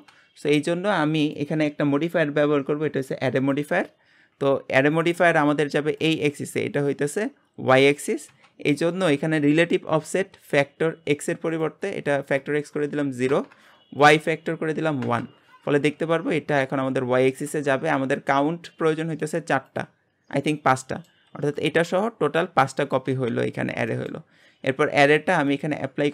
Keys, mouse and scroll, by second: 3.5-4.3 drag, 4.4 scroll down 3, 11.5-17.7 drag, 18.9-20.8 drag, 20.8-23.5 middle drag, 23.5-23.9 scroll up 1, 23.9 middle click, 24.3-25.5 scroll up 1, 25.5-26.1 drag.